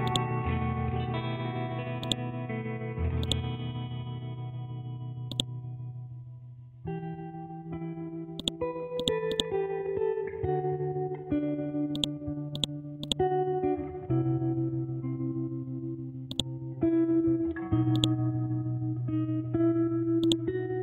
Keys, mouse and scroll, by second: 2.5 scroll up 1, 3.2 click, 3.6 scroll up 1, 5.3-7.6 drag, 7.6 scroll down 1, 8.4 shift+click, 8.8 c, 9.0-10.8 drag, 10.8 scroll up 1, 11.9 shift+click, 12.4 c, 12.5 click, 13.5 Up, 15.9 Down, 16.3 click, 16.6 scroll down 1, 17.2 scroll up 1, 17.9 click, 18.4 Down, 20.2 click, 20.6 Down.